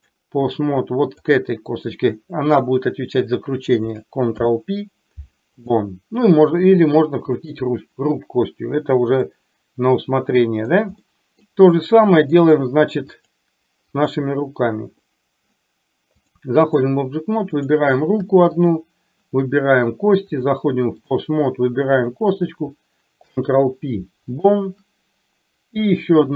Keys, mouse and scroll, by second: 4.4 ctrl+p, 7.4 click, 9.4-10.8 middle drag, 11.0 middle click, 16.3 click, 17.5 click, 18.6 shift+click, 20.5 click, 23.3 ctrl+p, 25.9 click.